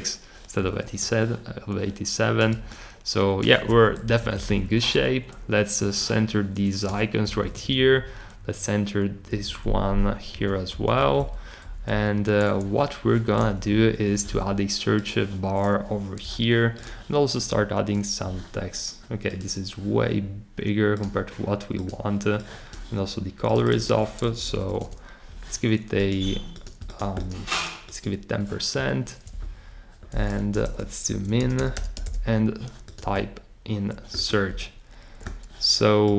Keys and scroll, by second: 4.1 Right, 4.5 Right, 7.4 Right, 7.8 Right, 9.3 Down, 9.6 Down, 9.8 Down, 10.3 Right, 10.7 Left, 11.0 Down, 11.2 Down, 11.6 Down, 11.8 Up, 13.7 Up, 16.2 t, 24.1-25.1 typing, 30.6 Return, 30.8-32.4 typing.